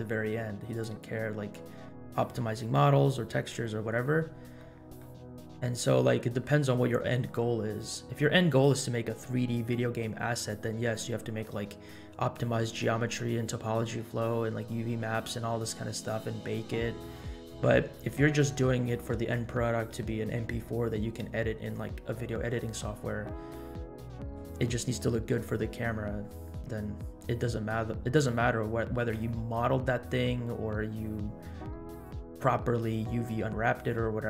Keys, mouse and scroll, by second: 0.7-1.2 drag, 1.4 middle drag, 4.6-5.0 middle drag, 5.4-5.8 middle drag, 17.6 scroll up 1, 23.2 middle drag, 23.9-24.3 middle drag, 26.7 scroll down 2, 27.2-27.7 middle drag, 33.7-34.2 scroll up 2.